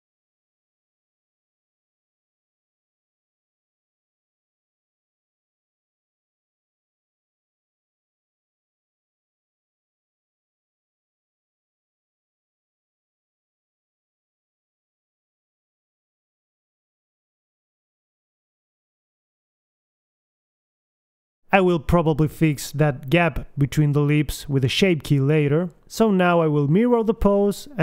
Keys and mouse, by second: 0.8 click, 1.3 r, 2.1-3.6 middle drag, 3.6 click, 4.0 middle click, 4.3 click, 4.9 g, 5.9 middle click, 7.7 KP_3, 8.0 middle click, 8.5 click, 8.9 middle click, 9.6-10.6 drag, 10.6 Right, 11.4 click, 12.1 Left, 12.6 g, 13.8 click, 14.1 g, 14.4 middle click, 14.8 click, 15.1 g, 16.5 click, 17.3 KP_1, 18.1 middle click, 19.3-20.3 drag, 20.8 g, 23.0-24.1 drag, 24.1 right click, 24.1 g, 25.4-26.9 middle drag, 26.9 KP_1, 27.1 g, 27.3 a, 27.4 b.